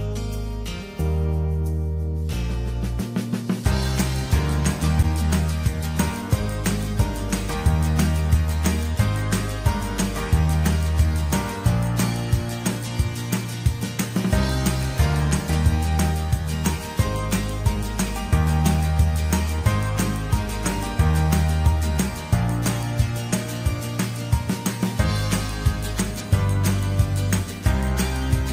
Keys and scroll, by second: 2.2 ctrl+j, 10.3 ctrl+g, 11.8 ctrl+e.